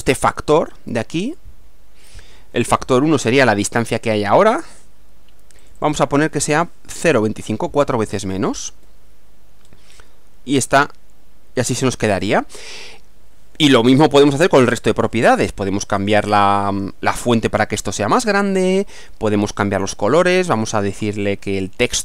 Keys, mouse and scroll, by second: 1.2 click, 2.8 scroll down 1, 5.6 click, 7.5-8.8 typing, 9.6-10.1 scroll up 4, 16.0 click, 19.9 click, 20.6 click.